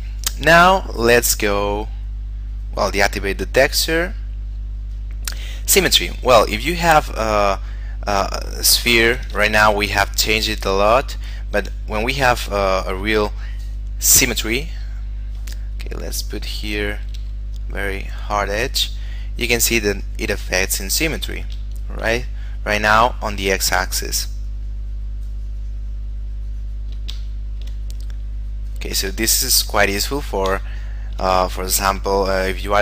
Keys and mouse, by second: 2.0 click, 8.7 shift+middle click, 9.7 ctrl+middle click, 10.7 shift+middle click, 14.3 click, 17.4 f, 17.8 click, 22.0 shift+middle click, 22.4 click, 24.7 click, 27.5 shift+middle click, 28.1 click, 29.5 shift+middle click, 30.0 click, 30.9 shift+middle click, 31.6 click.